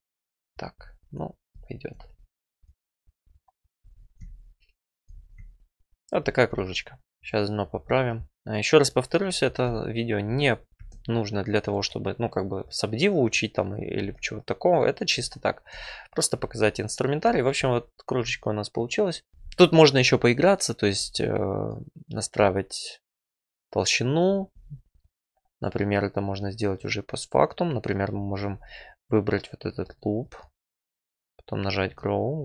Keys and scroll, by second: 3.8 F4, 7.7 4, 8.2 alt+e, 10.7 ctrl+r, 27.7 1.